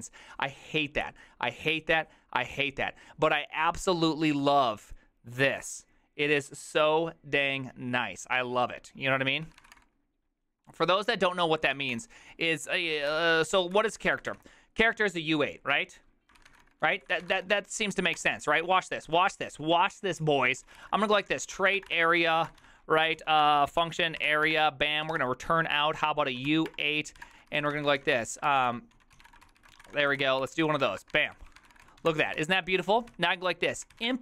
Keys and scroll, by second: 9.4 ctrl+c, 9.4-10.2 typing, 11.7 ctrl+c, 11.8-14.9 typing, 12.0 Return, 16.2-19.1 typing, 20.3-34.2 typing.